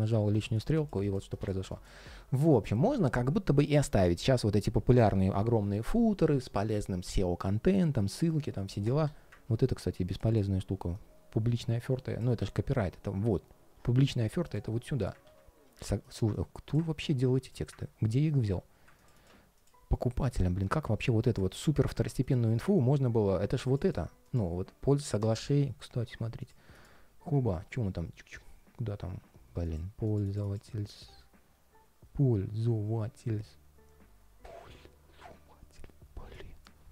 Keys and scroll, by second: 15.0 super+x, 15.5 super+z, 21.2 super+x, 25.2 super+v.